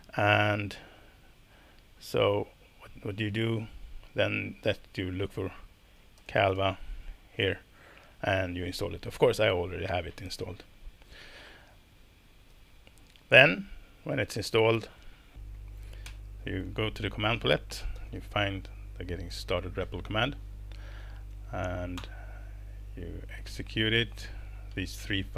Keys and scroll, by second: 5.7-7.0 typing, 12.5 super+b, 16.0 shift+super+p, 17.5-18.6 typing, 22.0 Return.